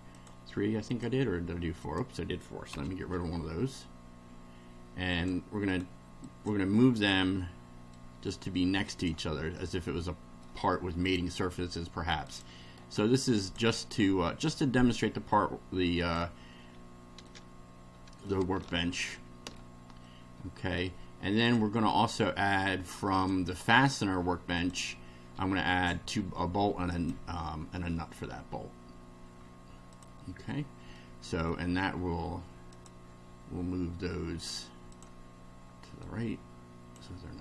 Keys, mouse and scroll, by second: 0.2 click, 0.9 click, 1.8 click, 2.7 Delete, 5.1 click, 5.7 right click, 6.2 click, 8.0-9.2 drag, 9.5-10.6 middle drag, 11.1 click, 12.2 click, 12.8 right click, 13.4 click, 14.5-16.3 drag, 16.7 scroll down 1, 17.2-18.4 middle drag, 18.6-19.7 middle drag, 20.0-20.9 shift+middle drag, 21.4 click, 23.2 click, 24.6 click, 26.9 click, 29.9 click, 30.9-31.7 middle drag, 32.7 click, 34.4 right click, 34.9 click, 36.1-37.1 drag.